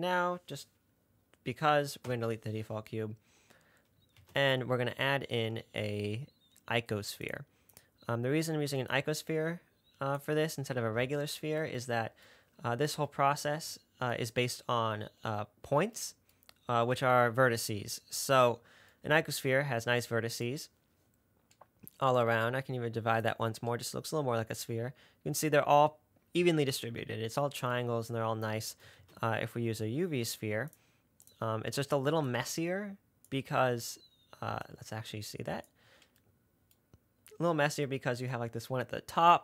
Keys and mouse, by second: 0.1 click, 2.3 Delete, 4.4 shift+a, 7.5 click, 9.3-10.6 drag, 10.6-12.7 middle drag, 23.5 click, 29.3 shift+a, 32.6-33.6 drag, 35.0-36.2 drag.